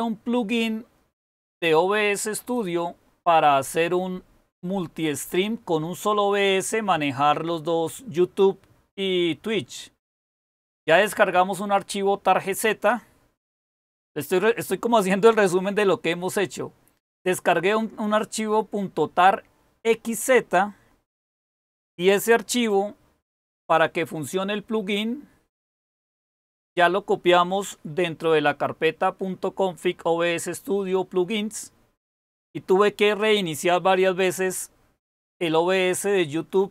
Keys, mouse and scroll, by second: 24.6 super+k.